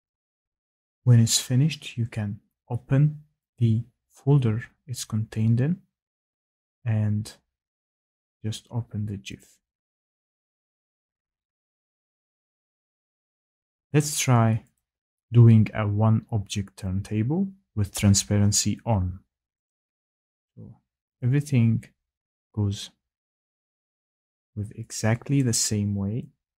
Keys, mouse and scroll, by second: 3.5 click, 6.2 click, 6.6 click, 9.4 click, 12.6 click, 14.7 click, 19.6 click, 21.2 click, 25.3 click.